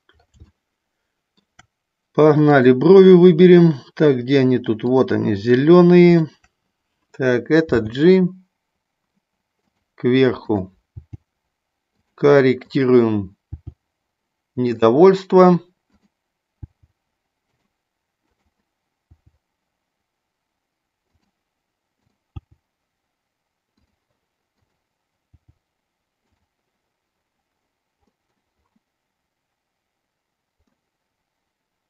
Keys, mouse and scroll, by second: 0.5 shift+middle click, 0.5 scroll up 1, 4.8 click, 7.6 g, 10.4 click, 13.4 g, 15.8 click, 16.5 g, 17.5 click, 18.2 click, 19.0 g, 21.1 click, 22.0 click, 22.4 g, 25.4 g, 28.0 middle click, 28.0 scroll up 1, 30.8-31.8 middle drag.